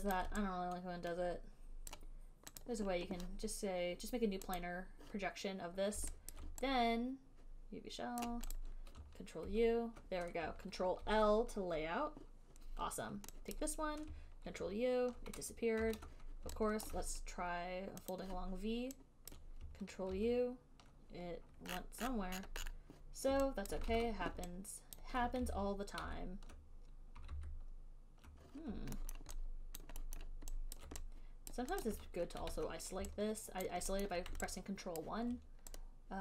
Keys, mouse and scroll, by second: 0.4 click, 0.4 middle click, 0.4 alt+right click, 2.2 right click, 2.2 alt+click, 2.9 right click, 4.9 right click, 6.6 alt+right click, 8.5 right click, 8.9 click, 9.7 ctrl+u, 11.3 ctrl+l, 13.8 click, 14.7 ctrl+u, 16.0 ctrl+z, 17.1 alt+click, 18.4 click, 19.6 click, 20.0 alt+middle click, 20.4 ctrl+u, 22.0-22.4 scroll down 11, 22.6-23.1 scroll up 12, 23.6 scroll, 24.0 alt+click, 24.3 ctrl+z, 24.6 scroll down 10, 25.3 alt+click, 25.8 ctrl+z, 26.3 ctrl+z, 27.6 ctrl+z, 29.5 alt+middle click, 30.1 alt+click, 30.5 alt+middle click, 31.0 alt+click, 31.9 click, 32.1 click, 32.5 right click, 32.8 ctrl+1, 34.0 alt+right click, 34.3 alt+middle click, 35.3 alt+right click.